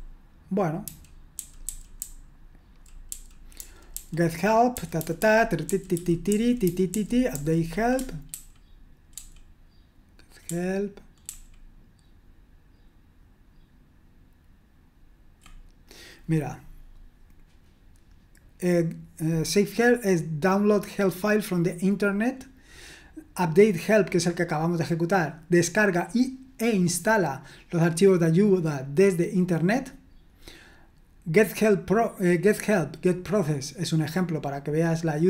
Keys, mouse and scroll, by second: 0.8-7.3 typing, 8.3 ctrl+d, 9.1 ctrl+d, 10.5 ctrl+d, 11.3 ctrl+d.